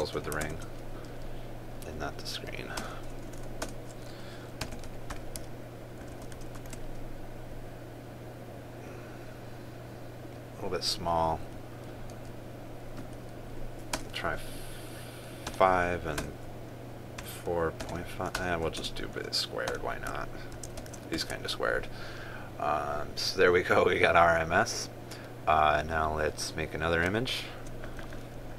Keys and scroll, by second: 1.1 ctrl+space, 6.8 ctrl+s, 7.3 ctrl+r, 21.3 ctrl+s, 21.8 ctrl+r.